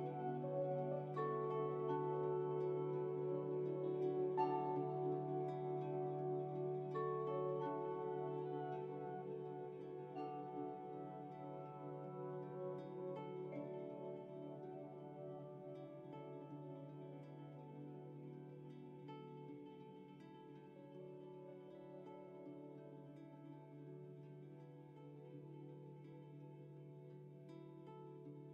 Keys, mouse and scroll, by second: 0.3-3.5 drag, 9.6 click, 13.1-16.8 drag, 17.4 click.